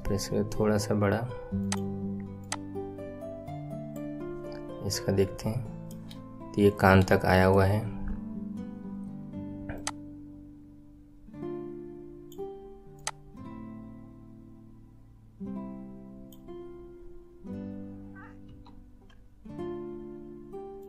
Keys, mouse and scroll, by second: 2.4 click, 4.5-5.4 scroll down 3, 5.4-7.7 right drag, 5.4 shift+middle click, 7.1 shift+middle click, 7.7-9.7 middle drag, 9.7 click, 12.9 click, 18.4 s.